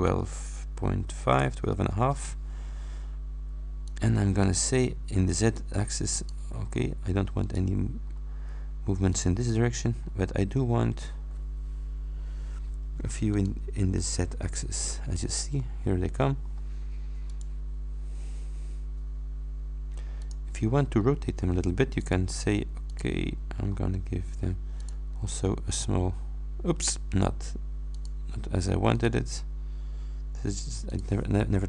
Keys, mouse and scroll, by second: 0.7 ,, 1.4 shift+9, 2.0 shift+Return, 5.5 click, 6.2 middle click, 6.7 scroll down 2, 8.1 scroll down 2, 9.2 middle click, 10.0-10.4 scroll up 2, 10.6-11.4 scroll up 2, 13.4 middle click, 15.6-16.7 middle drag, 17.4 click, 20.3 click, 22.0 click, 22.9 click, 23.4-23.9 scroll up 2, 24.8 click, 28.0 click, 29.0 click, 31.0 click.